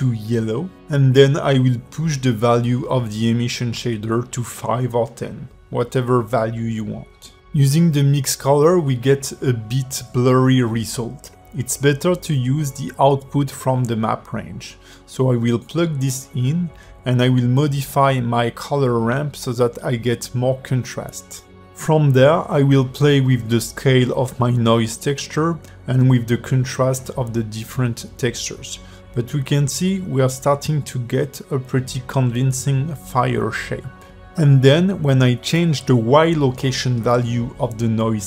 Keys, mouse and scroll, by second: 1.1 click, 1.6 click, 4.0 click, 5.6 click, 7.0 click, 7.2 g, 11.2 click, 17.9 click, 19.1 click, 20.4 click, 21.9 click, 22.7 click, 23.2 click, 24.4 click, 24.8 click, 25.1 click, 25.3 click, 25.7 click, 26.0 click, 26.3 click, 26.8 click, 28.1 click, 29.0-29.5 scroll down 4, 29.5-30.0 scroll up 4, 29.9 click, 31.4 click, 32.4-32.8 scroll down 8, 32.8 shift+middle click, 33.4 shift+middle click, 33.8 click, 36.1 shift+middle click, 36.4-36.7 scroll up 4, 36.7 click.